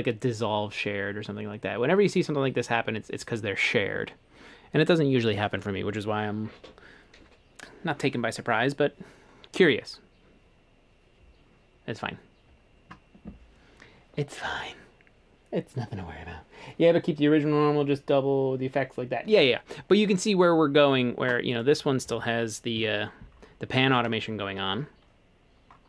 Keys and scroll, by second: 21.0 Escape, 22.8 a.